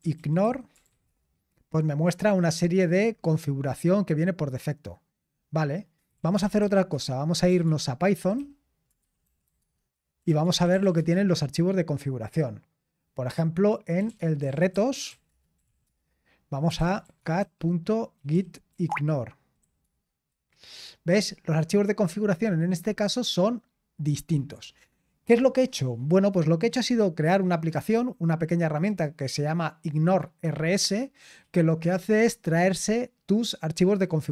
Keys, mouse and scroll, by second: 0.0-1.5 typing, 2.4-4.6 scroll up 1, 4.6-5.7 scroll up 1, 5.8-11.3 typing, 13.7-20.2 typing, 21.7-22.5 typing, 22.0-23.6 scroll up 1, 23.6-24.6 scroll up 1, 24.4-25.1 typing, 26.6-29.2 drag.